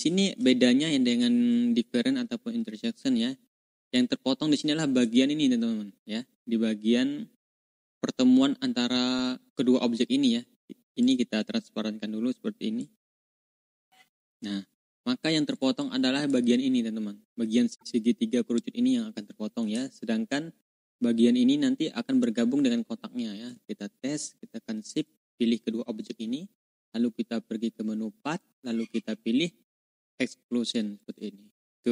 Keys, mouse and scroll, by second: 0.7-1.2 ctrl+drag, 3.2 ctrl+scroll up 2, 3.8-5.1 drag, 10.9 click, 12.7-14.4 drag, 14.6 ctrl+click, 15.0 ctrl+scroll up 2, 15.4 ctrl+click, 15.7-16.3 drag, 19.8 ctrl+scroll down 2, 24.8 shift+click, 25.5 ctrl+scroll down 2, 28.1 click, 31.7 ctrl+click.